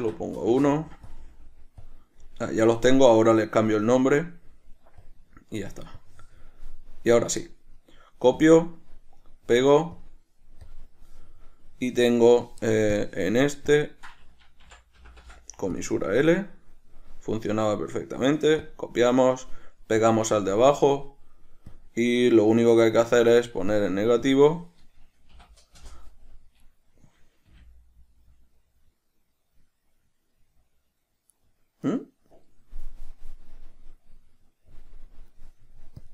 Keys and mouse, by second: 0.9 Return, 8.0-10.9 right drag, 10.9 drag, 13.2 drag, 14.0-17.6 drag, 17.6-20.8 right drag, 20.8 drag, 22.0-26.9 drag, 23.2 Escape, 26.1 Return, 26.9 right click, 27.7 g, 32.1 right click.